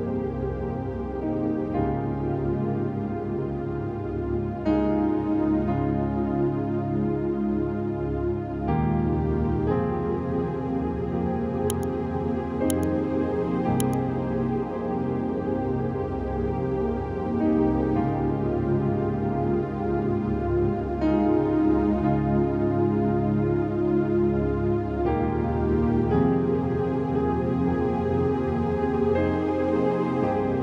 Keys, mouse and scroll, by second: 4.1 v, 5.1-8.0 drag, 9.6 click, 10.7-12.5 drag, 12.7 scroll down 1, 12.9 space, 13.0 click, 13.1 space, 13.5 click, 14.5 click, 19.0 click, 19.2 ctrl+z, 21.2 click, 22.0-22.6 scroll up 1, 22.6 click, 23.9-25.6 drag, 25.6 Return, 26.1 F4, 26.8 click, 28.8 v, 29.6 ctrl+click, 30.5 click.